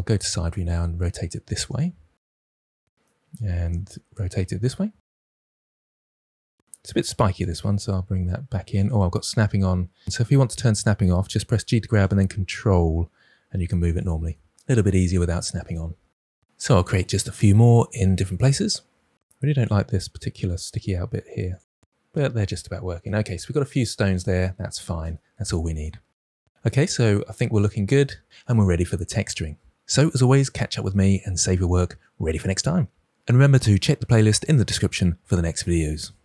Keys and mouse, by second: 0.4 r, 2.3 g, 3.1 shift+d, 4.2 r, 4.6 drag, 4.7 g, 5.3 s, 5.6 click, 5.7 g, 6.8 Tab, 7.3 click, 7.5 g, 11.6 g, 13.9 ctrl+click, 15.9 Tab, 16.7 click, 17.4-18.7 typing, 19.0 drag, 19.2 Tab, 19.8 g, 21.4 click, 22.2 Tab.